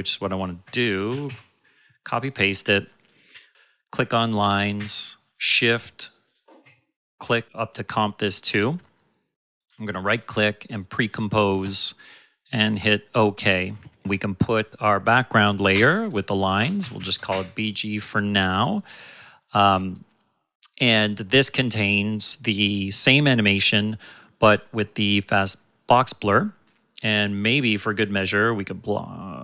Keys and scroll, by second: 0.6 ctrl+Num_Lock, 1.1 ctrl+c, 1.3 ctrl+v, 4.7 shift+Num_Lock, 15.7 Return, 16.5-17.5 typing.